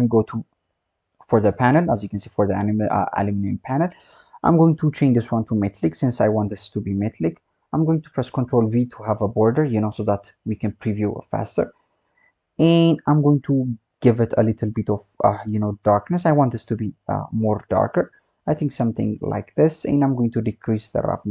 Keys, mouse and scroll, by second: 4.9-8.0 drag, 8.1 ctrl+b, 10.5-13.9 scroll up 5, 13.9 click, 20.2-21.3 drag.